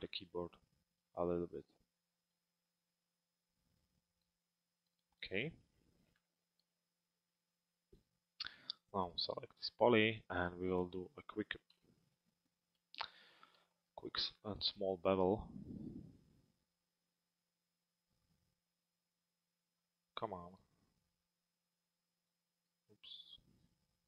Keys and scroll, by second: 11.5 f.